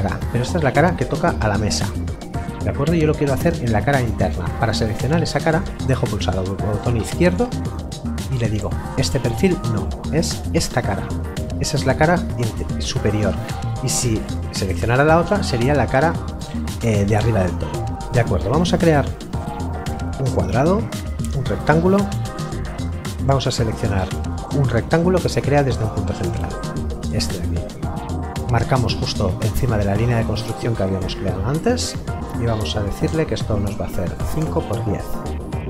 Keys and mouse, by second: 5.7 click, 19.8 click, 26.1 click, 31.5 click, 34.2 KP_5, 34.4 Tab, 34.5 KP_1, 34.7 KP_0.